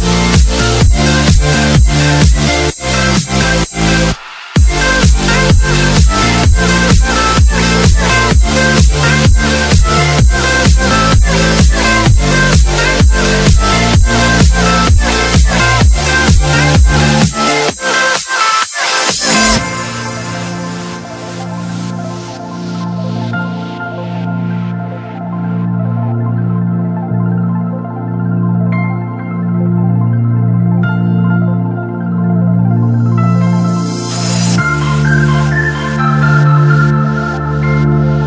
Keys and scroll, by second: 1.8 F3, 5.4 alt+c, 7.2 Escape, 10.0 Escape, 10.2 F4, 23.9 shift+F2, 28.5 ctrl+g, 29.9 z, 30.3 F3, 31.9 Escape.